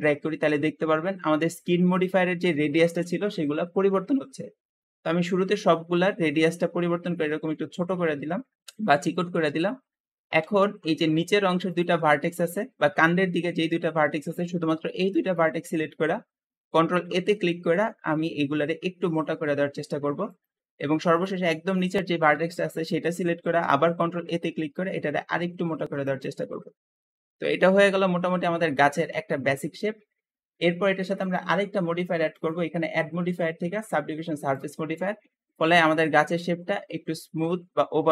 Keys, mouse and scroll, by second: 9.1 alt+z, 10.3 alt+z, 10.7 alt+click, 11.5 shift+click, 11.9-16.3 shift+middle drag, 16.3 ctrl+a, 21.0 click, 22.4-23.4 shift+middle drag, 23.4 ctrl+a, 26.3 alt+z, 26.8 alt+middle click, 27.3 Tab, 27.8-30.8 middle drag, 31.1-35.2 drag, 35.2-38.1 middle drag.